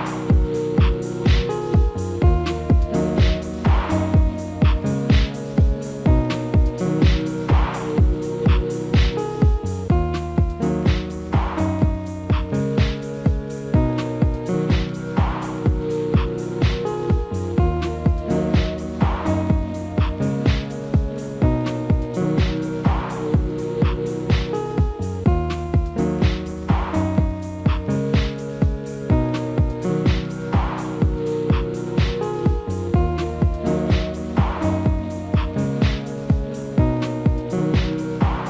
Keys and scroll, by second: 1.0 F4, 22.5 F4, 24.5 ctrl+z, 36.3 F4.